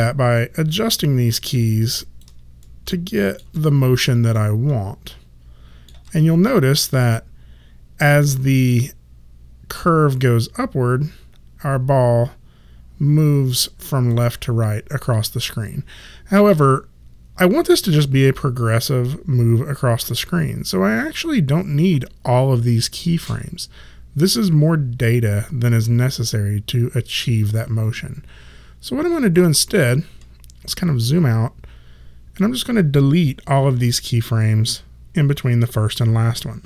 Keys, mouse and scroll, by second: 0.9 shift+middle click, 1.9 click, 2.6 shift+middle click, 3.6 click, 4.3 shift+middle click, 6.8 click, 30.8 click.